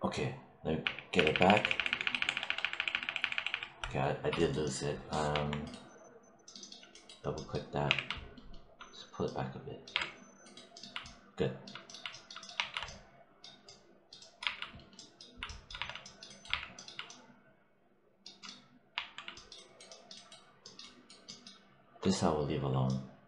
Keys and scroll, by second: 0.7 ctrl+y, 5.2 1, 7.8 w, 9.8 3, 12.4 1, 14.3 3, 15.6 1, 16.3 3, 18.8 1.